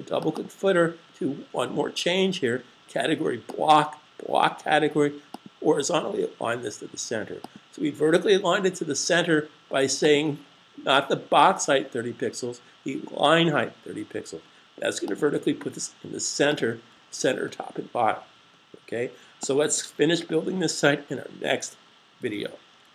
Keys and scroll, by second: 15.7 super+s.